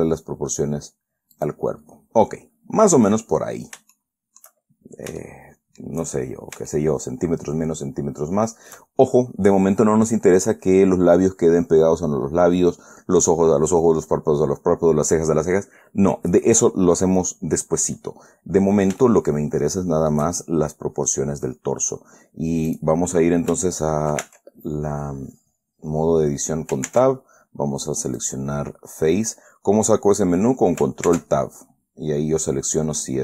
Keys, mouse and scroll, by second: 1.7 click, 2.6-3.0 scroll down 1, 3.0-3.4 scroll up 1, 4.3 shift+click, 5.0-5.4 shift+scroll up 3, 5.5 shift+middle click, 6.6-6.9 shift+scroll up 3, 7.0-9.2 shift+middle drag, 16.4-17.0 scroll down 2, 17.0-17.4 scroll down 1, 17.5 scroll up 2, 19.4-20.6 shift+middle drag, 23.0 click, 24.6 ctrl+Tab, 27.2 ctrl+Tab, 28.5 click, 31.4 ctrl+Tab, 32.8 click.